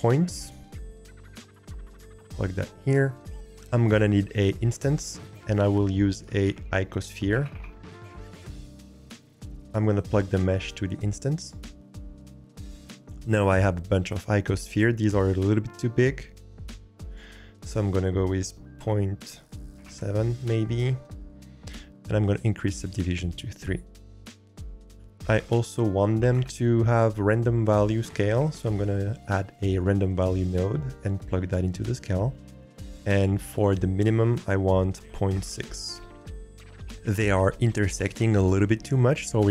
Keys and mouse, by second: 6.1 shift+a, 10.2-11.5 drag, 17.2-20.6 drag, 22.2 click, 22.9-25.0 drag, 25.2 shift+a, 31.3-32.0 drag, 33.6-36.5 drag.